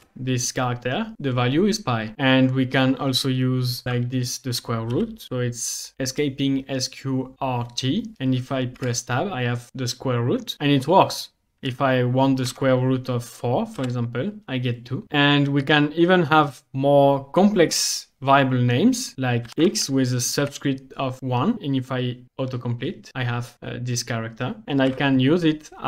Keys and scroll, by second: 0.0 Return, 3.9-6.4 typing, 8.8 Tab, 12.5 4, 13.7 Return, 18.9-20.4 typing, 22.2 Tab, 24.9 =.